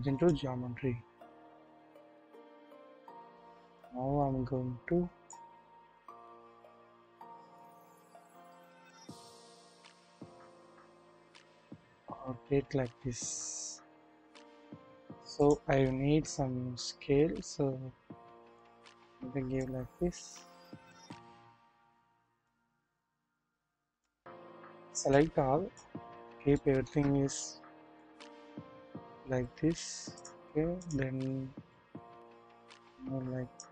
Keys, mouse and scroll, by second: 0.7 scroll down 1, 1.6-2.6 typing, 3.8-5.4 drag, 5.4 scroll, 5.7 scroll down 1, 5.8 typing, 6.2-6.6 scroll up 1, 7.0-9.5 middle drag, 9.6 KP_1, 9.8 shift+middle click, 10.9-11.4 scroll down 1, 11.5 r, 16.2 typing, 19.7-21.3 drag, 22.4 click, 22.6-24.1 drag, 25.1-25.8 drag, 25.1-25.8 scroll down 1, 26.3 shift+scroll up 1, 26.5-26.9 shift+middle drag, 27.0 shift+scroll up 1, 28.1-29.9 drag, 28.1 scroll up 1, 30.7 click, 31.2 scroll down 1, 31.6 shift+middle click, 32.8 click.